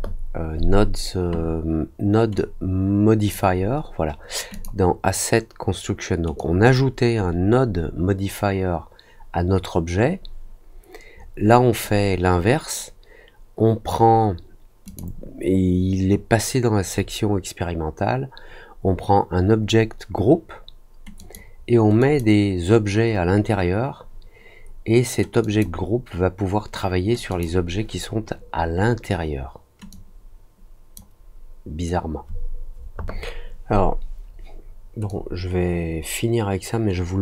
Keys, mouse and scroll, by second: 2.3 click, 4.5 click, 6.3-11.7 drag, 14.8 click, 17.5 middle click, 21.1 click, 21.9 click, 25.4 click, 27.2 click, 29.8-30.9 drag, 35.0-37.2 drag.